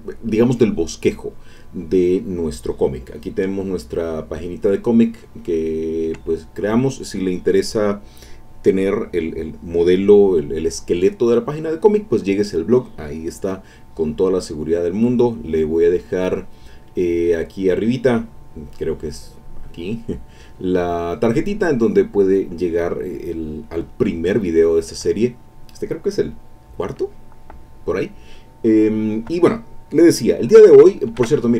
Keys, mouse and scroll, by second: 31.2 ctrl+Tab.